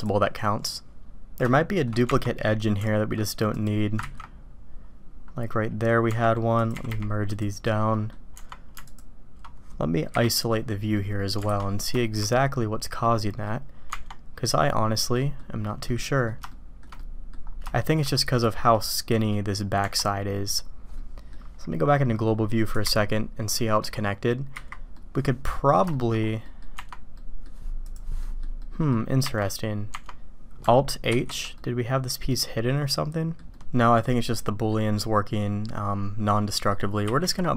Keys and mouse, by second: 0.0 click, 1.5-1.9 shift+middle drag, 4.0 ctrl+x, 6.1 Tab, 6.6 click, 6.7 g, 7.9 click, 8.3 Tab, 10.1 KP_Divide, 10.9 click, 11.5 alt+a, 12.0 shift+drag, 13.0 click, 13.9 Tab, 15.1 click, 15.8-16.3 drag, 16.5-16.8 shift+drag, 17.0-17.3 drag, 17.7 shift+drag, 18.5 click, 19.1 click, 20.9-21.3 drag, 22.7 KP_Divide, 23.5 click, 24.9-25.5 drag, 25.9 shift+drag, 26.4 click, 26.7 Tab, 27.1-27.4 drag, 28.2 drag, 28.6-28.9 drag, 31.1 alt+h, 31.6-33.4 drag, 33.5-34.7 drag, 36.5 click.